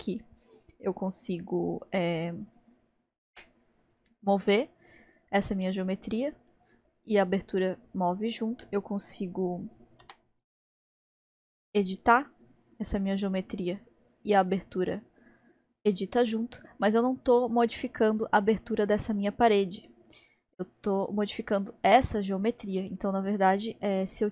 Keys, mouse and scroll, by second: 9.4 click, 10.1 s, 17.8 click, 20.9 click, 24.0-24.3 drag.